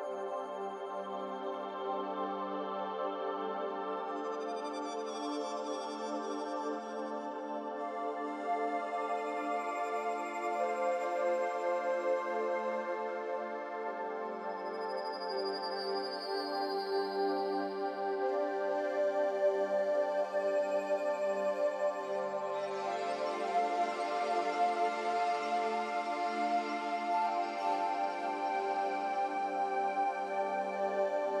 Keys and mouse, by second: 0.8 click, 2.3 g, 9.2 click, 10.5-13.0 drag, 14.8 click, 15.7 shift+click, 17.1 1, 18.8 click, 19.1 click, 23.9 click, 25.2 click, 31.0 click.